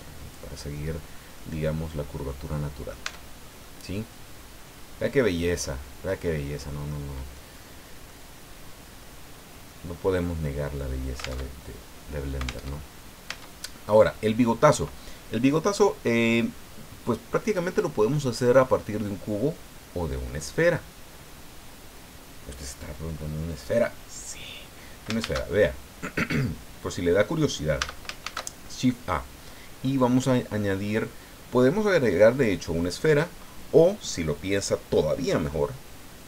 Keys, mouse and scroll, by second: 1.3-3.1 drag, 3.0 Tab, 3.4 scroll down 1, 3.6-7.0 drag, 8.1-9.2 drag, 9.7-11.4 drag, 11.4 alt+Tab, 12.6 alt+Tab, 13.3 Tab, 13.7-14.1 scroll up 2, 14.4-14.9 scroll down 4, 18.4 scroll down 2, 25.2 shift+a, 27.8 a.